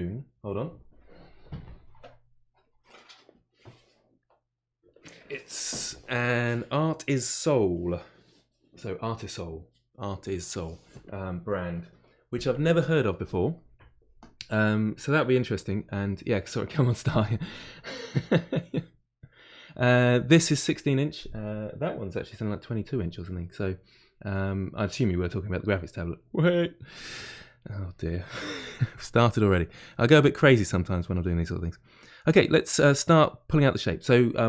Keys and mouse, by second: 28.6 f, 29.4-33.2 middle drag, 33.2-34.4 drag.